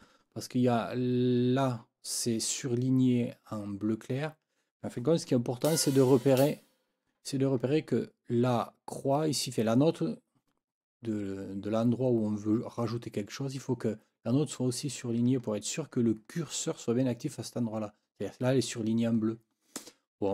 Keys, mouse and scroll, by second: 5.6 Left, 6.4 Right.